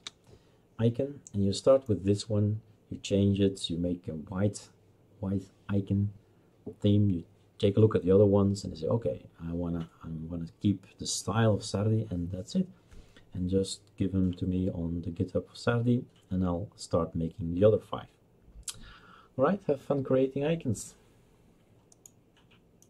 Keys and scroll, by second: 0.0-0.4 typing.